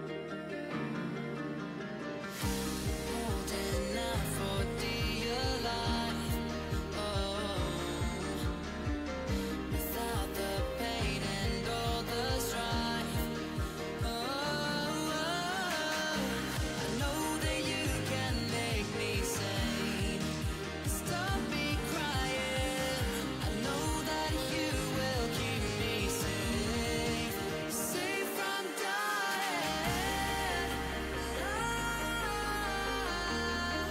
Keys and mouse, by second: 7.6-13.7 right drag, 13.7-22.9 drag, 24.4-25.7 drag, 27.3 f, 32.9-33.9 drag.